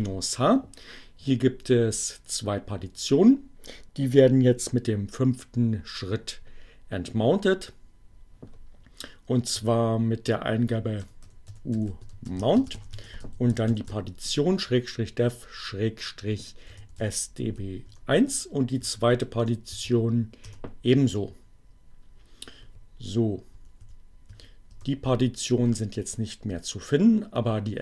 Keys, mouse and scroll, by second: 8.0 u, 10.2-13.8 typing, 15.3-16.2 typing, 17.3 1, 17.4 Return, 18.6 Up, 19.1 BackSpace, 19.7 2, 20.5 Return, 23.1 Up, 24.0 Return.